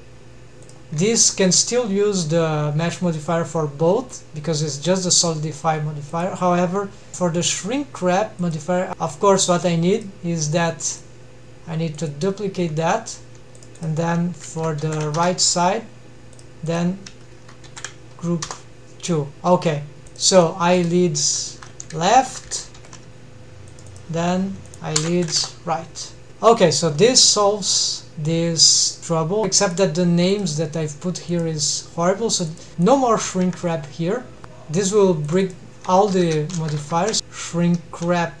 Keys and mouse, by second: 6.0 click, 11.7-12.7 drag, 14.2-16.0 drag, 17.1-19.7 drag, 20.7-26.3 drag, 22.7 shift+Left, 22.8 shift+Left, 23.0 shift+Left, 30.3 click, 32.8 click, 33.3 shift+Right, 33.3-34.4 shift+drag, 35.0-38.4 drag.